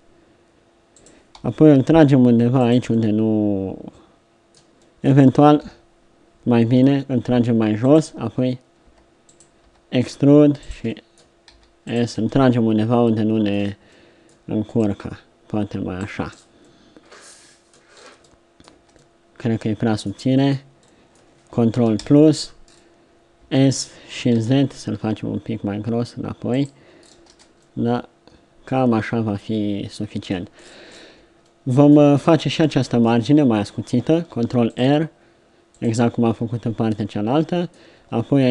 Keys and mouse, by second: 1.4 g, 5.7 KP_3, 6.8 g, 8.8 r, 9.7 e, 11.5 s, 16.2 Tab, 16.8 middle click, 18.7 Tab, 22.2 ctrl+KP_Add, 23.4 s, 27.3 Tab, 32.6 Tab, 34.1 ctrl+r, 37.2 middle click.